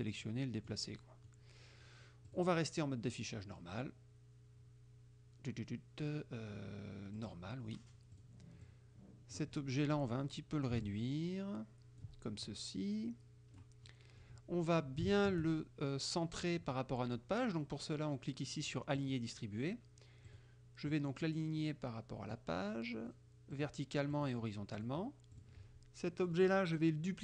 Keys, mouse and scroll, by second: 1.0 click, 1.2 middle click, 2.4 click, 7.2 click, 8.2 click, 8.7 click, 9.6 middle click, 10.9-12.2 ctrl+drag, 12.5-13.8 ctrl+drag, 14.0 click, 15.2 shift+click, 19.0 click, 20.3 click, 20.9-22.7 drag, 23.6 click, 24.2 click, 24.8 click, 25.4 click, 26.4 middle click.